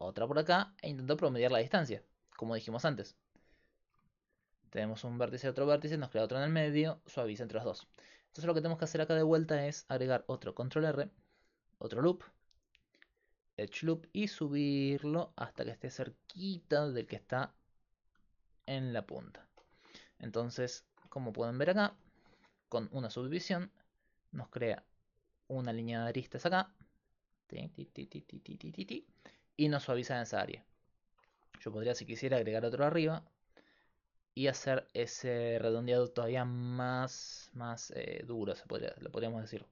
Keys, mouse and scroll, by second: 2.8 d, 3.0-6.8 drag, 3.8 d, 3.9 d, 7.7-10.1 middle drag, 10.1 ctrl+r, 18.1-21.5 drag, 21.5-24.4 middle drag, 24.4-27.3 d, 24.7 click, 26.9-28.8 drag, 27.5 d, 27.6-29.0 d, 31.6 ctrl+r, 37.3 Tab, 37.7 a, 38.4 x.